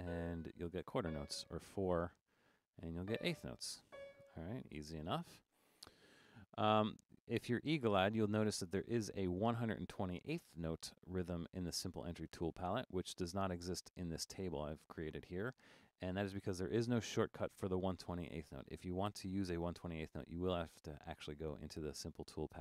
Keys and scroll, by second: 1.9 4.